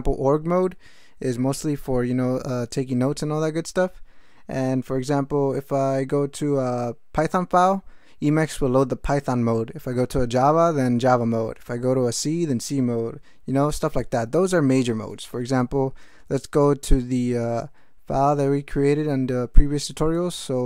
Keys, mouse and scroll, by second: 20.1 ctrl+x, 20.3 ctrl+f.